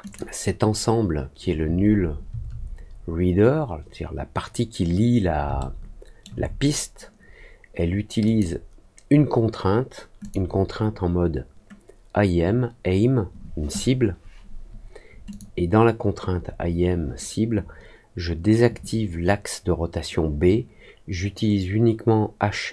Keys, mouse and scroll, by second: 0.0 click, 5.5 alt+middle click, 8.2 click, 10.1 click, 15.2 click.